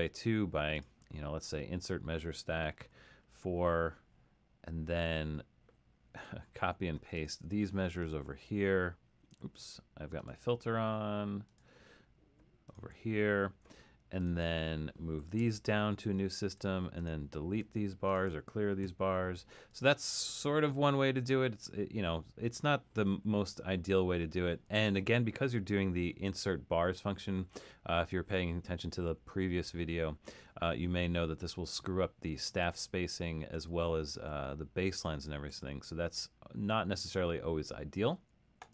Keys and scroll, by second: 2.9 4, 9.5 super+z, 15.5 Down, 19.0 shift+9, 33.6 super+z, 34.1 super+z, 34.9 super+z, 35.6 super+z.